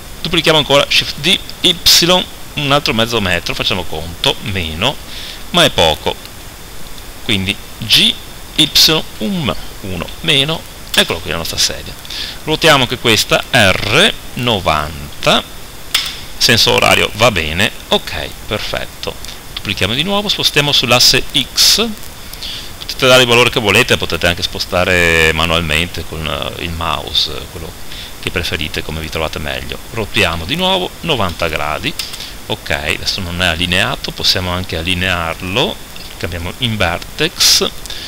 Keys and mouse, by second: 1.0 shift+d, 7.1 click, 7.9 g, 13.5 r, 19.8 shift+d, 28.3-30.2 drag, 30.2 r, 33.2-38.0 drag.